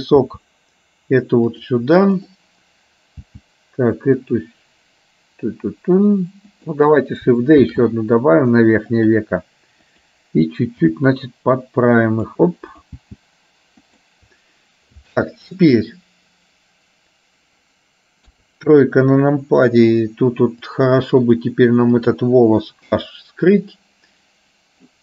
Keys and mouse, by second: 0.4 g, 3.3 g, 7.8 shift+d, 10.8 g, 12.8 click, 13.2 g, 18.3 KP_3, 20.8 click, 22.2 click, 22.9 h.